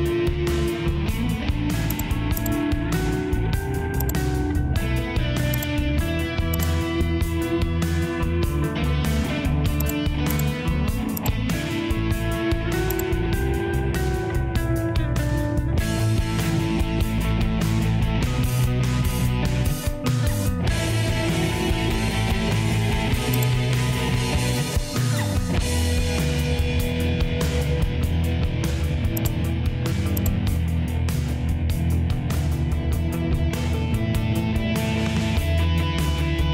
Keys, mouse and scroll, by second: 4.1 click.